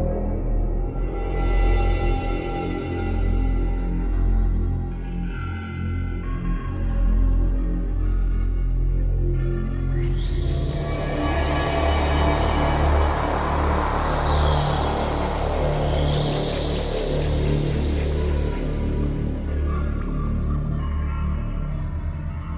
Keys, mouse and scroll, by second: 0.3 g, 2.3 click, 5.2 scroll up 4, 6.0 middle click, 8.7 middle click, 10.1 KP_0, 11.2-11.6 scroll down 3, 20.7 Escape, 21.2 right click, 21.9 scroll down 3.